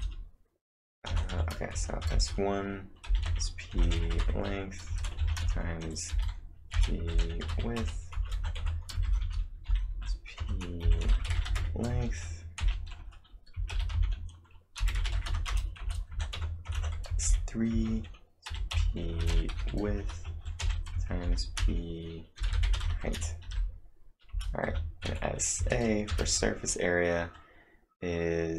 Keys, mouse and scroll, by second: 1.1-23.5 typing, 15.8 Return, 24.3 Return, 25.6 space, 26.1 =, 26.2 space.